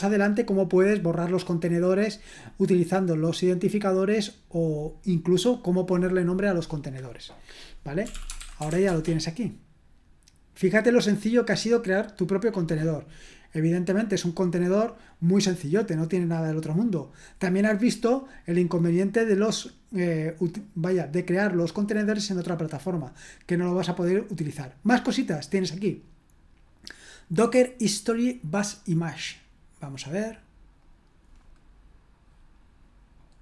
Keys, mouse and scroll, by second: 7.8-9.2 typing, 15.5-15.8 scroll down 2, 23.4-24.6 scroll down 1, 27.2-29.2 drag, 29.2 right click, 29.8 middle click, 30.8 right click, 31.4 middle click, 33.2 middle click.